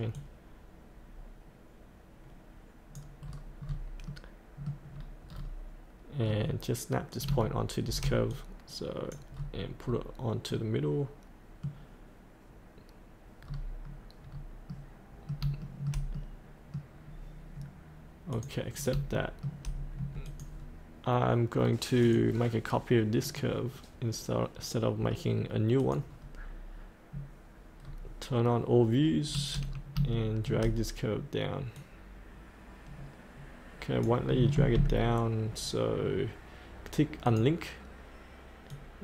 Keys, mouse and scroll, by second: 3.3-4.1 scroll up 1, 4.1 middle click, 4.9-5.4 scroll down 1, 7.1 click, 8.4 click, 9.4-9.8 scroll up 1, 10.5-12.1 middle drag, 13.4-14.1 scroll up 1, 14.2-14.7 scroll up 1, 14.7 middle click, 15.6 shift+middle click, 16.1 middle click, 17.2-18.1 scroll down 1, 18.3 click, 19.1 shift+middle click, 20.2-24.3 drag, 27.8-29.3 scroll up 1, 29.8 scroll up 1, 30.2 shift+middle click, 31.7-34.4 drag, 37.2-39.0 drag.